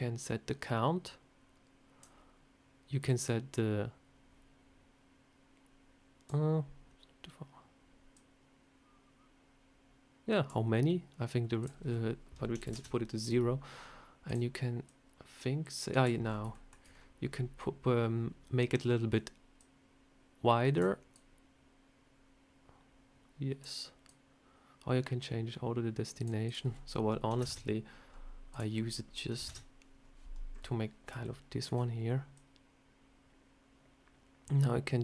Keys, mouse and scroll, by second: 3.0 click, 8.0 click, 11.5 click, 14.1 click, 14.7 click, 16.1-16.9 scroll down 6, 16.4 shift+middle click, 17.2 scroll up 3, 19.5 click, 21.0 click, 23.9 click, 26.3 click, 28.4 click, 30.4 scroll up 3, 31.1 shift+middle click, 32.2 click.